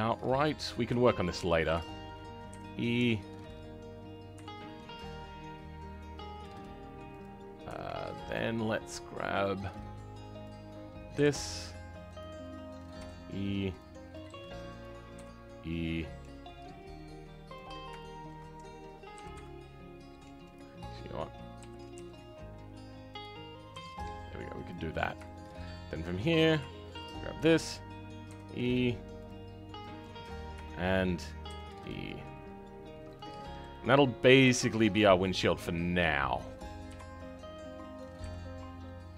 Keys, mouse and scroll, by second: 0.5-0.9 scroll up 1, 0.9 shift+middle click, 1.7 shift+middle click, 2.4 e, 7.3-7.7 scroll up 2, 7.7-9.3 shift+middle drag, 9.3-10.4 drag, 11.1 g, 17.6-17.9 scroll down 2, 17.9-19.1 shift+middle drag, 19.1 g, 25.2-26.3 shift+middle drag, 26.3 click, 28.2 e, 30.6 shift+middle click, 31.4 e, 33.3-33.6 scroll down 3, 33.6-36.8 middle drag, 36.8 KP_3, 38.1 g.